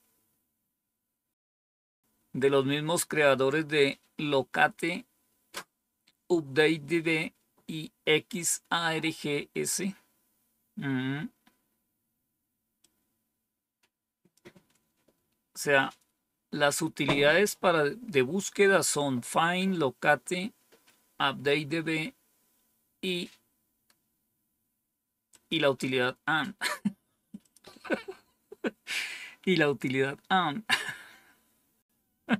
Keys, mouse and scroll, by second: 12.7-14.3 drag, 25.2 click, 25.8 click, 27.4 click, 31.8-32.3 scroll down 2.